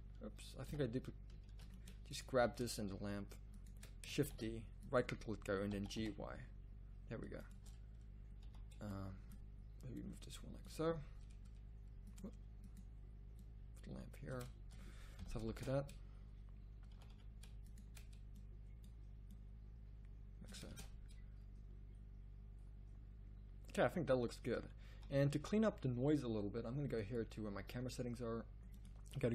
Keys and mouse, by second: 0.6 x, 1.5 ctrl+z, 2.3 z, 4.3 shift+d, 5.7 g, 8.4 z, 12.1-13.4 right drag, 15.1 KP_0, 15.8 shift+z, 17.0 z, 17.1 z, 20.9 shift+z, 25.1 z.